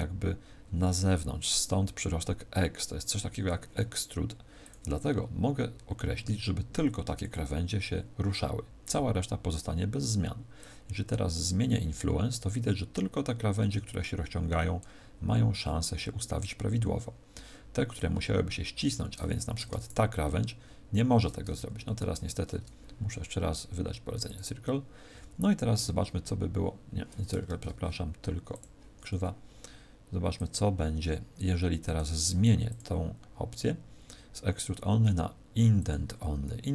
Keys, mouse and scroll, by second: 4.6 click, 10.5 click, 19.8 alt+shift+right click, 21.5 ctrl+z, 24.2 click, 27.4 ctrl+z, 28.4 click, 30.3 click, 32.6 click.